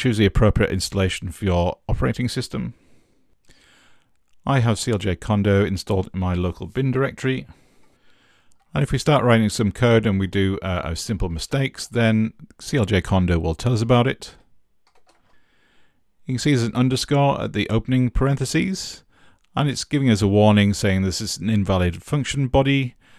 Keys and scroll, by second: 7.6-8.4 typing, 9.7-11.9 typing, 14.1-16.8 typing.